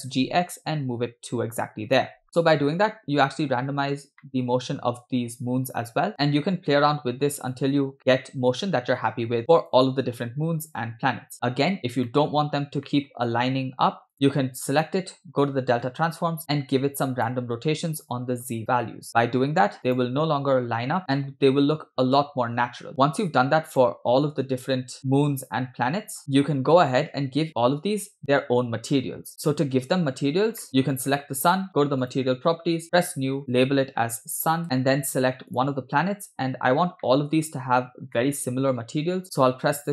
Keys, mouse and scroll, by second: 0.0 g, 2.2 scroll down 6, 2.2 space, 3.6 scroll up 2, 4.2-4.9 shift+middle drag, 6.1 click, 6.1-7.5 scroll down 2, 6.1 space, 7.5-9.5 drag, 9.5 g, 10.2 scroll down 2, 10.6 scroll up 2, 12.1-12.5 shift+middle drag, 12.5 scroll up 2, 13.0 shift+middle click, 14.1 click, 16.6 click, 18.4 click, 19.1 click, 19.9 drag, 21.1 click, 21.1 scroll down 2, 21.4 space, 22.2 space, 23.0 click, 23.8 click, 25.0-26.2 drag, 26.2 scroll down 5, 26.2 space, 27.2 scroll up 2, 27.6-28.0 scroll down 2, 29.4 space, 29.8 space, 30.3 scroll down 2, 30.6 middle click, 30.7 scroll up 2, 31.0 click, 32.1 click, 32.9 click, 33.5-34.7 drag, 35.5 click, 36.7 scroll down 2, 37.0 middle click, 37.7 scroll up 3, 38.2 shift+middle click, 38.9 scroll down 2.